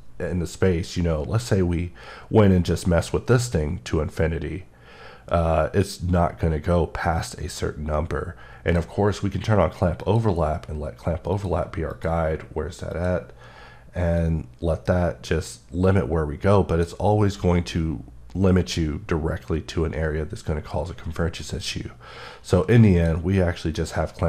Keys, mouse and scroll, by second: 21.4 click.